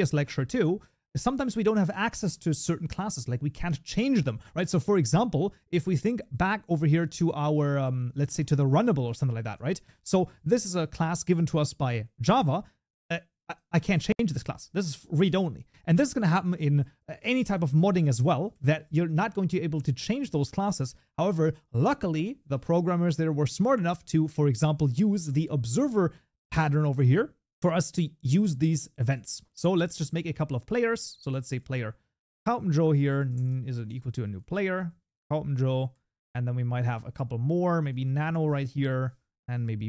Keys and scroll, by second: 9.8 Delete, 10.5 Tab, 13.3 ctrl+b, 18.6 ctrl+s, 31.3 Tab, 36.6 ctrl+d.